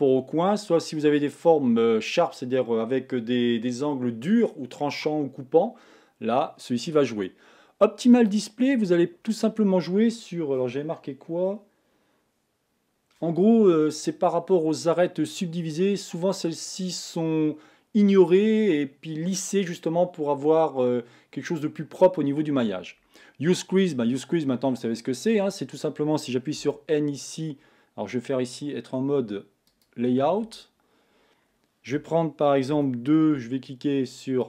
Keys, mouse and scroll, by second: 8.3-10.2 drag, 26.6 n, 29.8 click, 30.4 Tab, 32.0 a, 32.7 2.